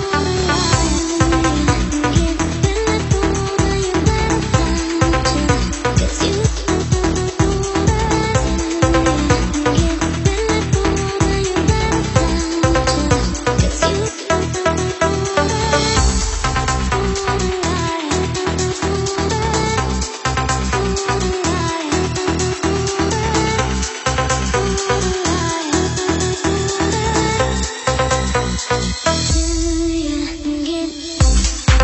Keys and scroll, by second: 1.1 Up, 1.3 Up, 3.6-4.4 Up, 4.9 Down, 5.1 Down, 8.3-19.4 Up, 8.3 t, 9.5-10.5 typing, 20.5 shift+Down, 22.0 Up, 24.6 Down, 24.7 Down, 25.0 Down, 25.5 Down, 25.7 Down, 26.3 Down, 26.7 Down, 28.7 Down.